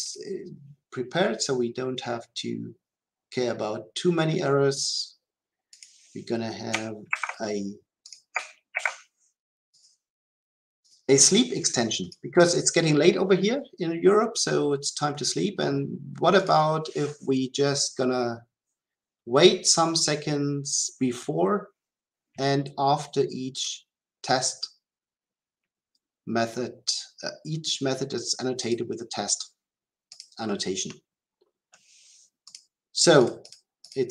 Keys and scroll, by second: 8.8 ctrl+v.